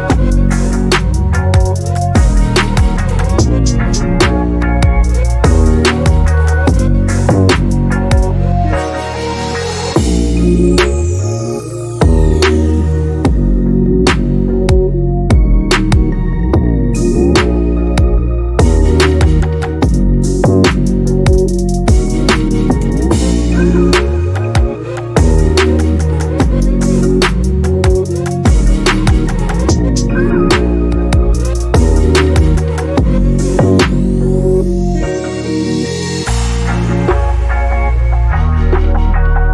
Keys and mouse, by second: 0.7 click, 1.9 click, 2.8 shift+middle click, 2.9 click, 3.8 middle click, 4.1 KP_Decimal, 4.5 click, 5.1 click, 6.2 click, 6.6 click, 7.1 click, 8.1 middle click, 8.4 ctrl+z, 8.7 middle click, 9.0 shift+middle click, 9.2-10.3 drag, 10.4 shift+middle click, 11.5 click, 12.1 click, 12.5 middle click, 13.2 click, 13.4 click, 14.0 click, 15.1 click, 15.8 click, 17.0 shift+middle click, 17.8 click, 18.4-19.7 drag, 20.0 click, 20.7 n, 21.0 middle click, 21.1 shift+a, 22.0 click, 22.5 KP_0, 22.7 shift+middle click, 22.9 middle click, 23.3 shift+a, 23.9 middle click, 24.1 click, 28.6 ctrl+space, 29.2 shift+middle click, 29.4 middle click, 29.6 click, 30.0 ctrl+shift+click, 30.8 shift+a, 32.0 click, 32.9 click, 33.5 click, 33.7 middle click, 34.1 click, 34.4 middle click, 34.6 click, 35.1 click, 35.4 click, 36.0 ctrl+shift+click, 36.3 middle click, 36.5 ctrl+shift+click, 37.3 shift+middle click, 37.9 middle click, 38.3-39.4 drag.